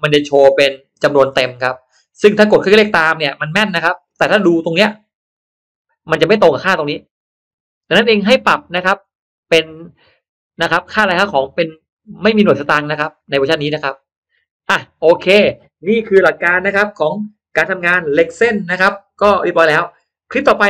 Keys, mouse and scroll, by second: 1.0-2.2 drag, 2.6 click, 3.2-3.6 scroll down 1, 3.6-4.0 scroll up 1, 3.8 middle click, 8.2-9.0 scroll up 2, 9.0 middle click, 9.9-10.3 scroll down 1, 10.5 middle click, 11.1 scroll down 1, 12.0 middle click, 13.8 middle click.